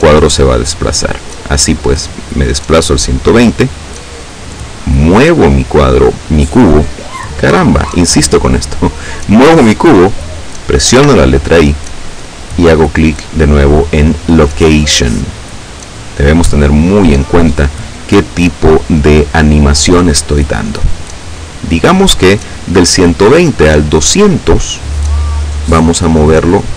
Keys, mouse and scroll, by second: 0.7 click, 2.4 click, 4.6-9.9 drag, 10.2 i, 14.1 click, 23.9 click.